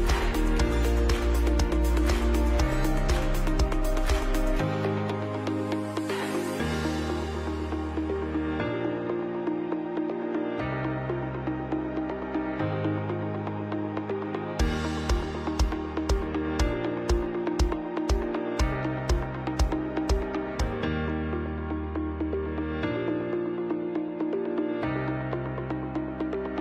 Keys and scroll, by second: 0.1 ctrl+3, 1.0 ctrl+3, 1.2 ctrl+3, 1.4 ctrl+3, 1.9 ctrl+alt+g, 3.4 ctrl+3, 5.2 ctrl+3, 6.0 ctrl+3, 9.4 Up, 9.5 Up, 9.6 Up, 9.6 Up, 9.7 Up, 10.1 Left, 10.2 Left, 10.3 Right, 10.4 Right, 10.5 Right, 14.7 Right, 14.7 Right, 14.8 Right, 14.9 Right, 14.9 Right, 15.0 Right, 15.3 Right, 15.9 Left, 16.0 Left, 17.7 space, 20.2 space, 23.4 space, 24.0 Left, 24.4 Left, 24.5 Left, 24.7 Left.